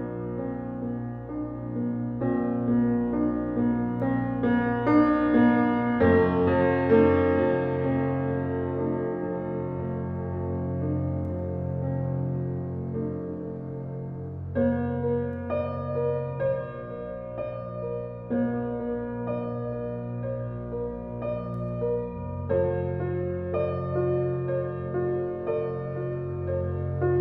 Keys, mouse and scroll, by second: 0.2 g, 1.4 Tab, 1.9 Tab, 2.2 a, 3.0 click, 3.6 e, 4.7 Tab, 5.6 ctrl+2, 6.0-6.3 scroll up 4, 6.3-7.7 middle drag, 7.7 Tab, 9.1 ctrl+z, 9.4 ctrl+z, 9.9 Tab, 11.1 click, 11.9 ctrl+r, 13.0 s, 15.0 Tab, 15.6 ctrl+2, 16.1 click, 16.3 right click, 16.9 click, 17.1 click, 17.5-18.2 right drag, 18.2-19.0 middle drag, 19.0-19.4 scroll down 2, 19.4-21.0 middle drag, 21.3-22.2 middle drag, 22.2 g, 24.4 alt+middle click, 24.7 alt+middle click, 25.1-25.4 scroll down 2, 25.7 shift+d.